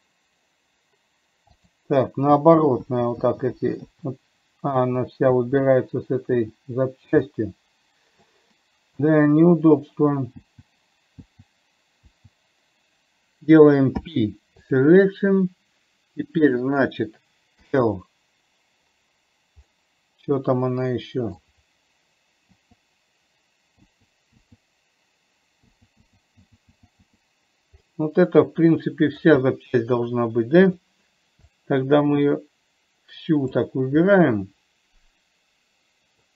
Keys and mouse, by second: 3.2-6.7 typing, 7.6-8.6 middle drag, 11.7 l, 14.4 p, 16.9 click, 20.1-21.6 middle drag, 24.2 l, 26.1-27.5 typing, 28.1-29.6 middle drag, 31.1 click, 31.9 click, 34.5-36.3 middle drag.